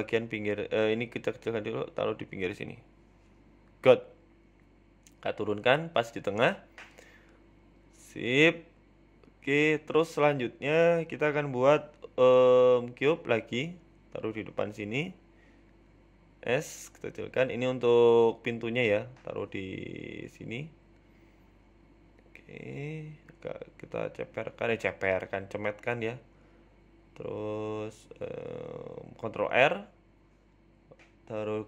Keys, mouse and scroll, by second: 1.0 click, 1.5 s, 2.8 g, 5.0 KP_1, 5.4-6.6 scroll up 5, 5.6 shift+middle click, 6.0 shift+middle click, 6.6 g, 8.1-8.6 scroll down 7, 8.9 g, 9.9 Tab, 10.0 scroll down 1, 10.2 middle click, 11.2 KP_1, 11.6 scroll up 3, 11.6 scroll down 1, 11.8 shift+middle click, 12.8 shift+middle click, 12.8 shift+scroll up 1, 13.1 shift+a, 14.3 middle click, 15.1 g, 16.3 KP_1, 16.7-17.1 scroll up 4, 17.0 shift+middle click, 17.9 s, 19.2 shift+middle click, 19.4 z, 20.3 g, 22.8 shift+middle click, 23.3 Tab, 24.3 s, 26.2 s, 27.9 click, 28.9 shift+middle click, 29.4 scroll down 1, 29.6 shift+middle click, 30.7 ctrl+r, 31.5 scroll down 2.